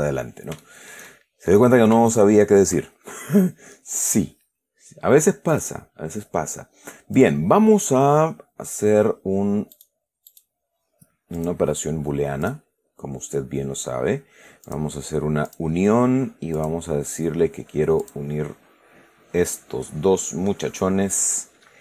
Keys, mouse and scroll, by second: 0.9-2.0 shift+middle drag, 2.4 shift+right click, 5.8 click, 7.5 click, 10.0 right click, 10.6 right click, 11.7 click, 12.7 click, 15.0 click, 15.8 click, 16.9 click, 18.3 click.